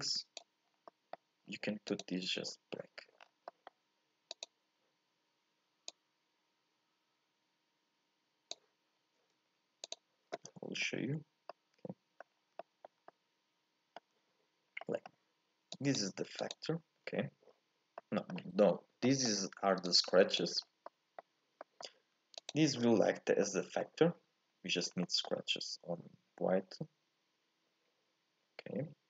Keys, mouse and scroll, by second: 9.9 ctrl+shift+click, 11.5 middle click, 12.2-12.6 scroll up 3, 12.6 shift+middle click, 12.9 scroll down 1, 13.1-15.8 middle drag, 15.8 click, 16.5 ctrl+shift+click, 18.0-22.4 middle drag, 22.4 ctrl+shift+click, 23.5-24.5 middle drag, 24.5-24.9 scroll up 1, 24.9 scroll down 1, 25.0-29.0 middle drag.